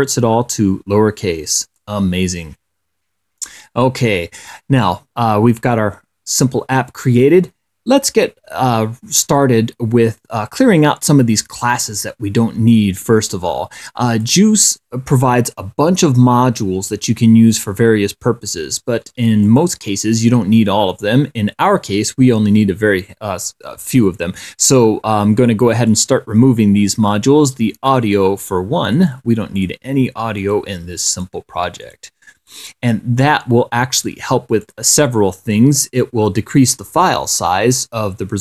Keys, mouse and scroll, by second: 1.9 click, 14.4 click, 19.7 click, 26.1 right click, 28.1 click, 29.2 right click, 29.8 click, 30.7 right click, 31.4 click, 32.1 right click, 32.8 click, 34.3 click, 34.9 click.